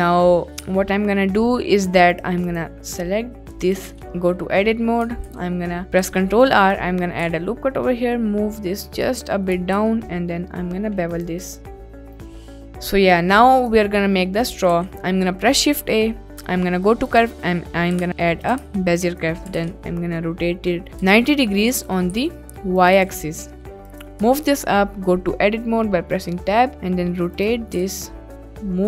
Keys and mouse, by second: 0.7 ctrl+s, 1.7 middle drag, 2.1 click, 2.5-3.8 drag, 4.9 ctrl+Tab, 5.2 ctrl+e, 6.0 ctrl+r, 7.2 g, 7.8 z, 9.1 click, 9.7 ctrl+b, 11.7 Tab, 11.8 click, 12.2 ctrl+s, 12.5 middle click, 14.6 shift+a, 18.0-19.5 typing, 20.5 y, 20.9 9, 21.1 0, 21.7 click, 22.2 s, 22.9 click, 23.4 g, 23.4 z, 23.9 click, 24.3 Tab, 26.1 click, 26.7 r, 27.4 click, 27.8 g, 27.8 z.